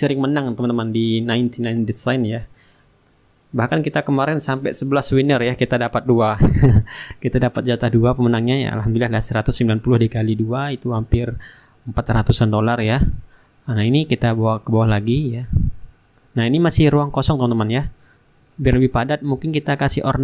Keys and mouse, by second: 3.5-5.3 middle drag, 6.1 click, 6.8-9.2 middle drag, 11.7-15.6 drag, 16.4-17.5 middle drag, 18.1 click.